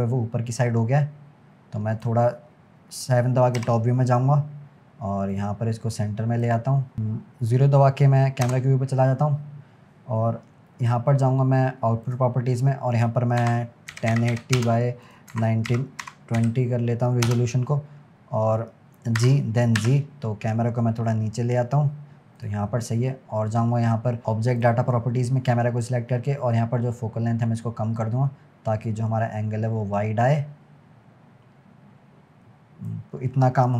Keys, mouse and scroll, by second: 0.0 click, 3.6 KP_7, 4.4-4.7 scroll up 2, 5.3 click, 8.5 KP_0, 12.1 click, 13.0-17.9 drag, 17.9-19.2 scroll down 2, 19.2 g, 24.6 click, 26.6-29.7 drag.